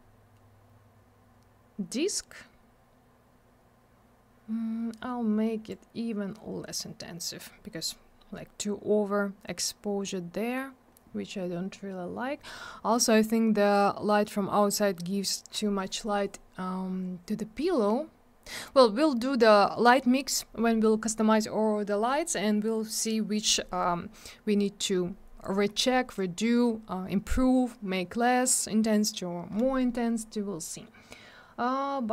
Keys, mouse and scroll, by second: 5.7 click, 25.4 click.